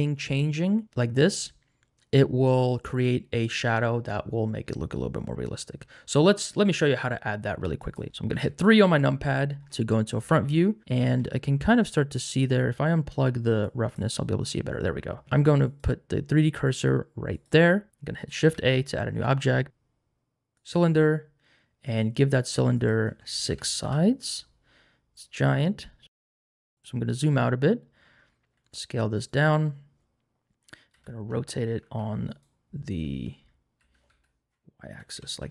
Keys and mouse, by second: 7.8 click, 8.3 KP_3, 13.6 click, 15.7 click, 17.3 click, 18.4 shift+a, 21.8 click, 22.8-23.9 drag, 26.8 s, 28.5 s, 30.9 r, 31.3 x, 31.8 c, 32.3 right click, 33.8-35.5 typing, 35.4 Return.